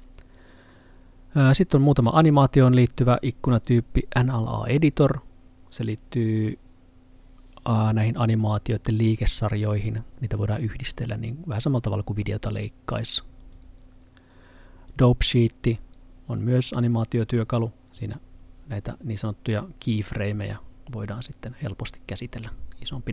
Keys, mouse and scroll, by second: 3.8 click, 13.6 click.